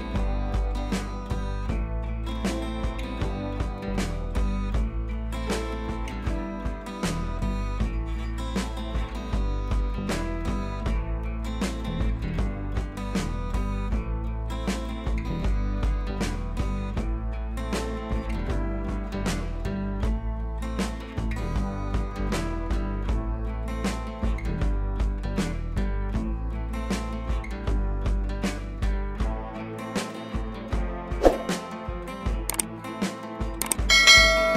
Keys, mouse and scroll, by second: 2.1 ctrl+a, 2.7 click, 3.2 ctrl+d, 3.4 click, 4.4 Up, 5.2 click, 5.4 scroll up 1, 6.1-6.7 scroll down 1, 8.6 right click, 9.0 click, 13.6-16.6 drag, 19.4 scroll down 1, 20.1 click, 21.7 u, 22.5-23.8 drag.